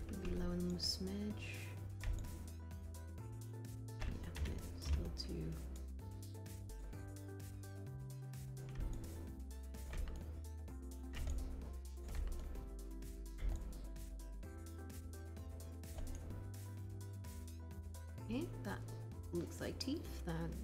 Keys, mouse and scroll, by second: 4.8 r.